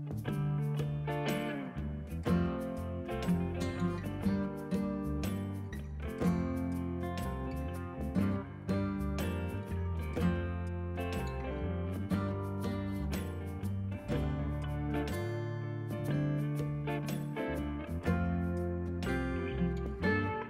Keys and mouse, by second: 2.7 click, 3.0 right click, 3.2 click, 3.4 a, 4.1 click, 5.8 click, 6.1 ctrl+click, 6.7 click, 7.4 click, 9.5 right click, 11.4 click, 15.9 KP_1, 16.1 click, 17.3 click, 18.5 click, 19.5 click.